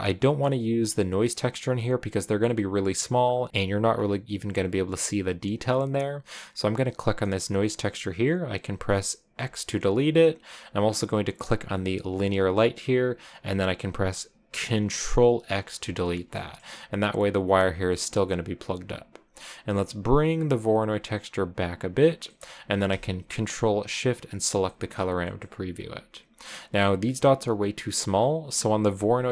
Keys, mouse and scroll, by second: 1.1-3.8 drag, 3.8-5.3 scroll up 3, 5.3-6.8 scroll down 2, 6.8 click, 9.2 x, 9.4 x, 12.0 click, 15.4 ctrl+x, 15.8-16.3 scroll down 4, 16.3-18.7 middle drag, 18.7-19.5 scroll up 2, 19.5-24.5 drag, 24.8 middle click, 25.6-26.9 scroll up 3, 28.2-29.3 drag.